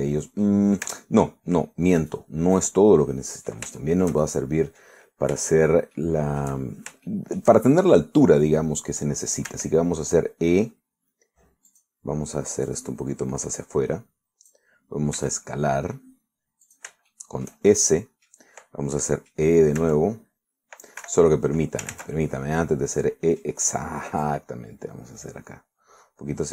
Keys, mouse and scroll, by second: 1.5 middle click, 1.9 Tab, 3.1 right click, 3.6 right click, 4.1 middle click, 4.8-7.7 shift+middle drag, 8.0 shift+middle click, 10.6 e, 12.8 click, 13.7-15.8 drag, 16.2 s, 17.7 shift+click, 18.2 shift+middle click, 18.8 shift+middle click, 20.0 middle click, 20.8 e, 22.1 Escape, 23.0 ctrl+z, 23.3 ctrl+click, 23.4-24.7 ctrl+middle drag, 25.3-26.5 drag.